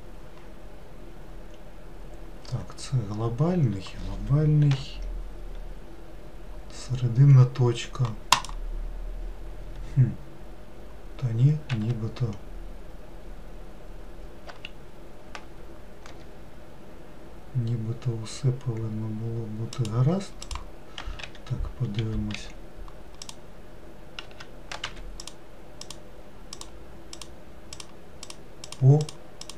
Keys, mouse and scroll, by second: 4.7 ., 11.7 s, 20.4 click, 21.2 3, 22.0 4, 23.2 click, 24.2 q, 25.2 click, 26.6 click, 27.1 click, 27.7 click, 28.3 click, 28.6 click, 29.0 click, 29.4 click.